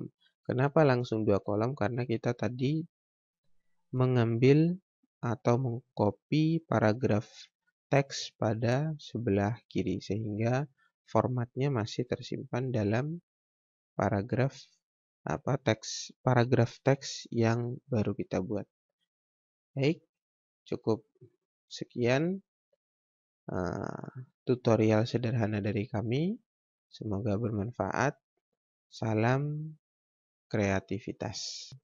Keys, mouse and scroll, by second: 2.0 click, 11.6 click, 21.3 click, 31.6 ctrl+Num_Lock.